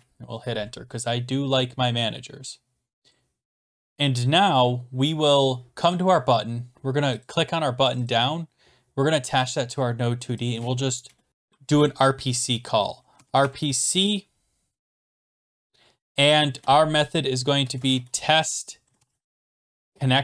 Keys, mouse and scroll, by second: 3.1 click, 3.4 click, 3.4-4.6 scroll down 10, 5.9 click, 7.1 click, 7.2 click, 7.9 click, 8.1 click, 9.5 click, 10.5 click, 11.1 Return, 12.9-13.9 typing, 15.2-20.2 typing.